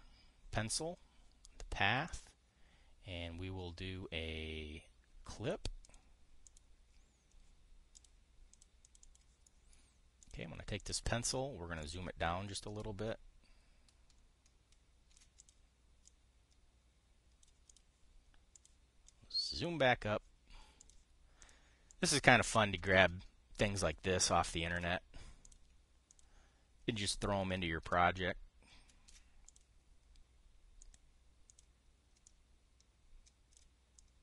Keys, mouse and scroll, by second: 2.8 click, 6.5 click, 7.1 click, 8.6 click, 9.2 click, 9.6 click, 10.2 click, 10.9 click, 11.5 click, 12.9-16.0 ctrl+drag, 16.1 click, 16.8-18.2 drag, 18.4 click, 19.2 click, 19.8 click, 21.5 click, 22.1 click, 22.6 click, 23.5-25.6 ctrl+drag, 26.2 click, 26.8 click, 27.7-29.9 ctrl+drag, 30.2 drag, 31.5 click, 32.2 click, 33.0-34.2 drag.